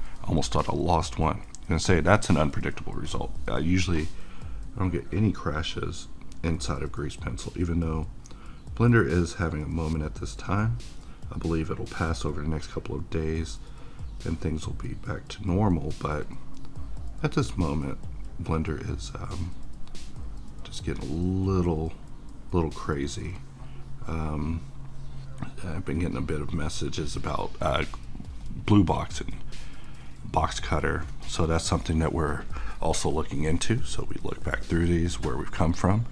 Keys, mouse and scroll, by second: 33.3-35.5 middle drag, 35.5 middle click.